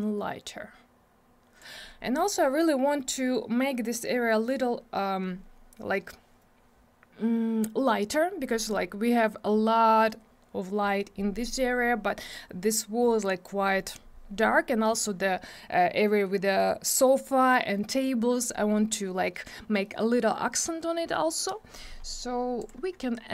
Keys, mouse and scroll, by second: 22.6 click.